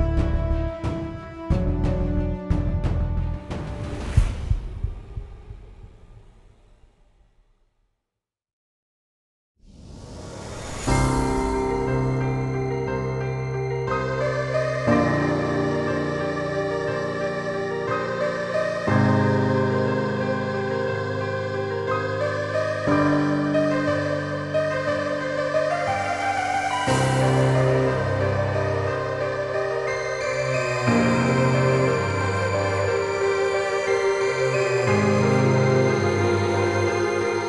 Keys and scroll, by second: 9.5-14.3 typing, 14.5 Return, 19.4 typing.